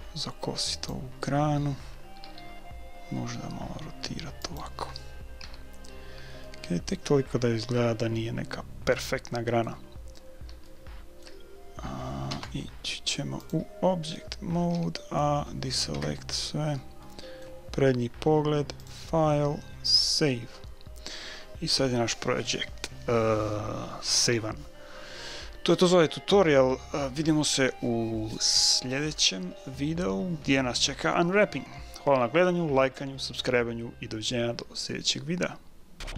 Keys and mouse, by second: 0.0 click, 2.2 r, 5.4 a, 6.1-8.4 middle drag, 9.9-12.6 middle drag, 12.3 Tab, 14.8 a, 15.9 KP_1, 17.0-18.6 middle drag, 18.8-20.6 drag.